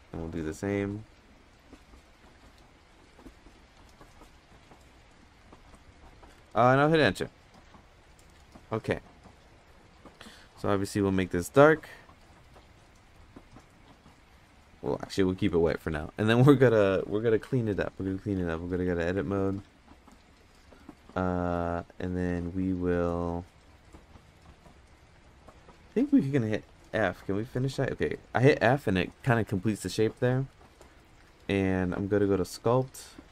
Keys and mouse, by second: 10.1 click, 15.7 middle click, 18.3 Tab, 18.7 Tab, 18.9 click, 19.1 Tab, 19.5 click, 24.8 middle drag, 25.7 a, 26.9 f, 30.8 middle drag, 32.4-33.3 drag.